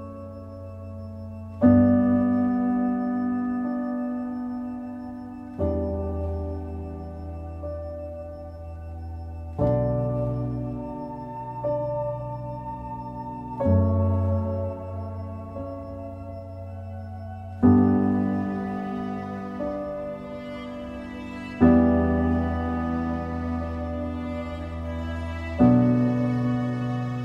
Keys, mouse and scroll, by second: 1.4 scroll down 1, 1.6 middle click, 2.0 z, 2.6 middle click, 3.5 click, 3.8 middle click, 4.5 Delete, 4.9 click, 6.2 Delete, 6.5-7.0 scroll up 1, 7.0 click, 7.8 click, 8.4 middle click, 9.1 a, 11.8 q, 14.0-19.5 drag, 20.4-22.8 middle drag, 22.8 click, 23.3 middle click, 23.6 click, 24.1 click.